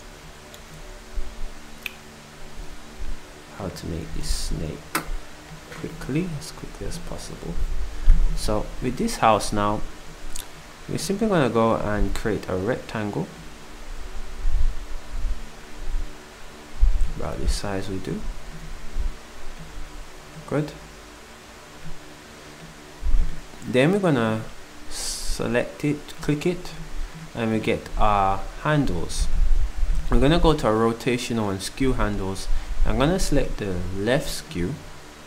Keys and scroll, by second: 17.1 s, 28.2 s.